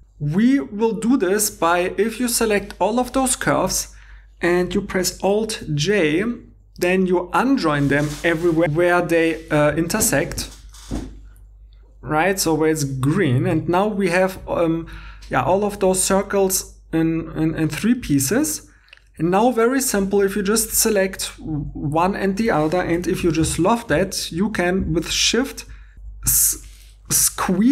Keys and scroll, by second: 5.6 alt+i, 9.3 1, 13.5 2, 19.2 2, 23.2 i, 25.9 ↺, 27.1 i.